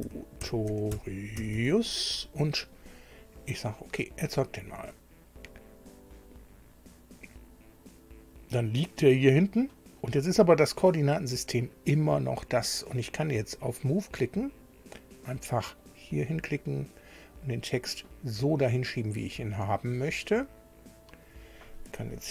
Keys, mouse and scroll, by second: 0.0-2.1 typing, 4.2 click, 7.6-8.0 scroll down 1, 8.1 scroll up 1, 10.2-12.3 middle drag, 13.4 click, 15.8 click, 21.1 click, 21.9-22.3 scroll up 1.